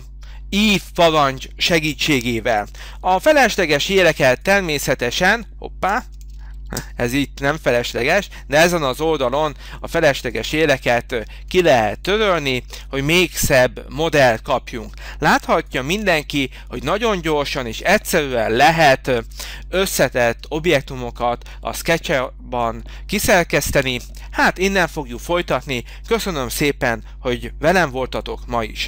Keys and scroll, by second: 3.3 e, 6.5 ctrl+z, 15.2 h.